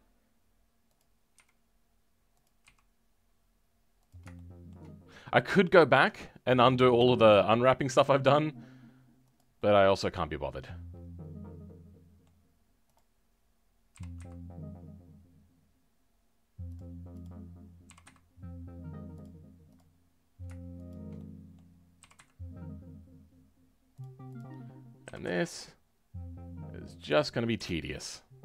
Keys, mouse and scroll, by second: 4.3-7.9 shift+middle drag, 7.9 e, 9.5-12.9 middle drag, 12.9 click, 13.2-13.8 scroll up 2, 13.9 g, 19.7 click, 21.1 middle click, 22.0 g, 27.5 KP_7, 27.8-28.3 scroll down 3, 28.3-28.4 scroll up 2.